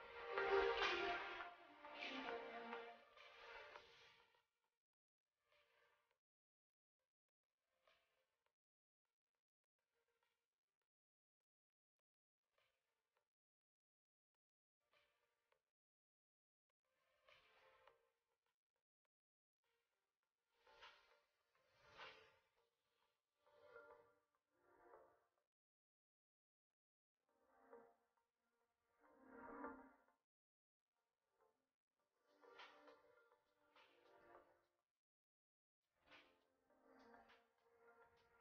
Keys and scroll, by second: 4.8 shift+space, 6.3 shift+space, 11.2 shift+space, 14.8 shift+space, 15.8 Escape, 16.8 space.